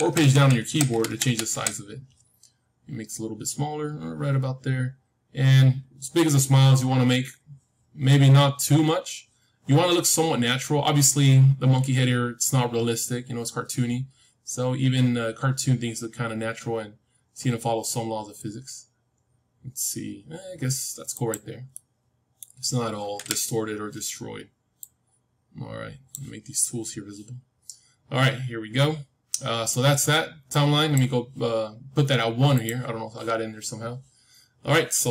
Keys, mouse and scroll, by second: 21.6-23.8 middle drag, 23.1 KP_1, 24.7-27.0 drag, 30.4-34.5 drag.